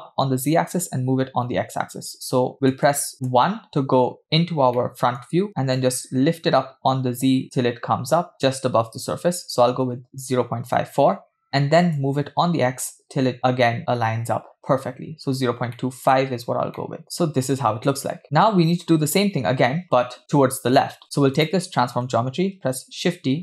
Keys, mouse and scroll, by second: 2.7 KP_1, 3.3 KP_1, 3.9-4.6 scroll up 3, 4.8 shift+middle click, 5.4-5.7 scroll up 1, 5.8-10.7 shift+drag, 12.0-14.4 shift+drag, 15.2-15.6 scroll up 3, 15.8-16.2 shift+middle drag, 16.2-16.6 scroll up 2, 16.8 shift+middle drag, 18.1-18.5 scroll down 7, 20.6-21.3 scroll down 3, 21.4 click, 22.7 shift+d.